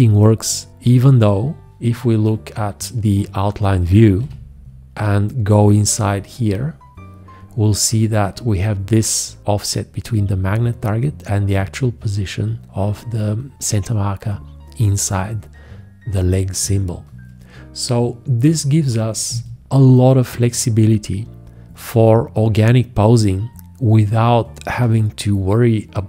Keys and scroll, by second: 4.2 v.